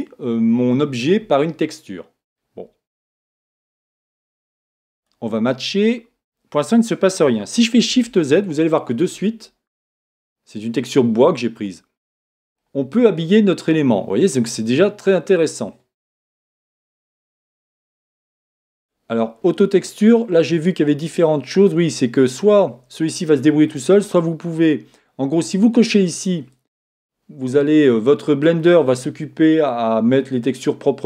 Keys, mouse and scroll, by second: 3.4-6.9 drag, 8.1 shift+z, 9.1-14.4 middle drag, 16.3-18.8 middle drag, 18.8-22.9 drag, 19.2-22.6 middle drag, 23.7 click, 26.1 click, 27.8-31.0 middle drag.